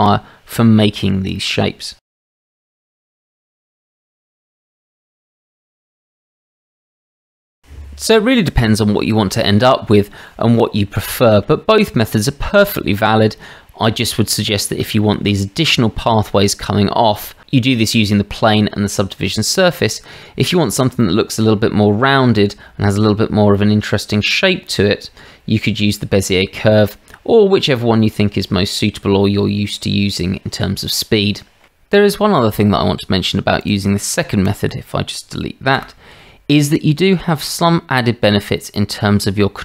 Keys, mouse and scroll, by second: 1.4 shift+drag, 2.3 shift+d, 2.7 click, 2.9 r, 3.3 g, 4.3 Tab, 4.4 shift+z, 4.6 shift+z, 4.8 g, 5.6 click, 6.4 g, 7.0 Tab, 7.4 shift+drag, 11.0-11.4 shift+drag, 21.0-21.4 shift+drag, 22.4-22.9 shift+drag, 23.6-25.6 middle drag, 30.2 click, 34.5 click, 35.7 Delete.